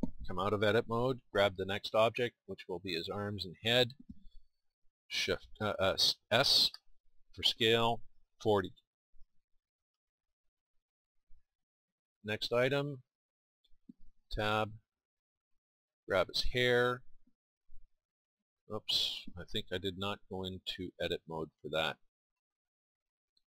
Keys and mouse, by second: 0.9 Tab, 2.3-3.8 drag, 6.7 s, 14.2 Tab, 16.0-17.3 drag, 17.3 Tab.